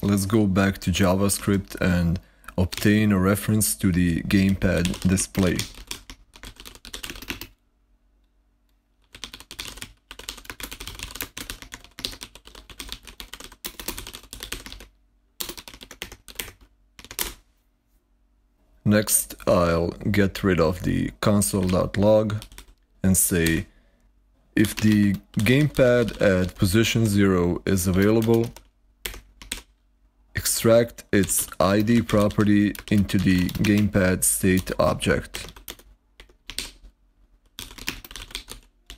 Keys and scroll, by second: 0.9-12.3 typing, 14.2-17.5 typing, 21.5-29.4 typing, 30.8-35.4 typing, 35.2 Escape, 35.5 Return, 36.0 Escape, 36.4-38.9 typing.